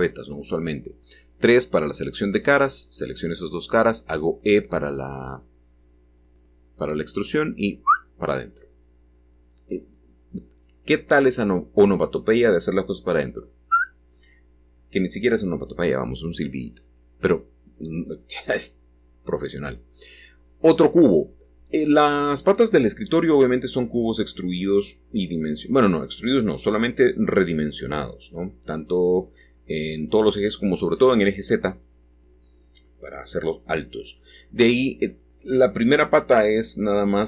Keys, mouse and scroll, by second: 1.2 3, 2.1 click, 3.4 shift+click, 3.9-5.8 middle drag, 5.8 e, 7.5-9.5 drag, 11.2 typing, 18.3-19.2 scroll down 1, 19.2-21.0 scroll down 1, 21.0-22.1 drag, 21.0 typing, 22.7 g, 26.1 click, 27.0-29.3 scroll up 1, 29.4-31.5 drag, 33.3 click.